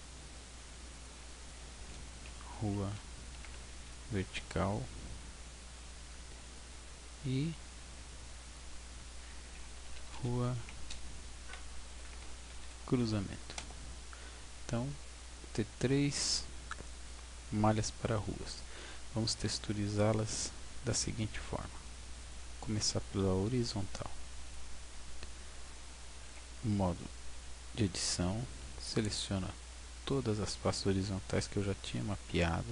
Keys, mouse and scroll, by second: 0.9 click, 6.6 right click, 8.4 click, 15.6-17.1 scroll down 2, 19.2 right click, 24.5 click, 26.4 Tab, 28.5 a, 29.8-30.1 scroll up 4, 30.3-31.5 scroll down 4, 31.5 scroll down 2.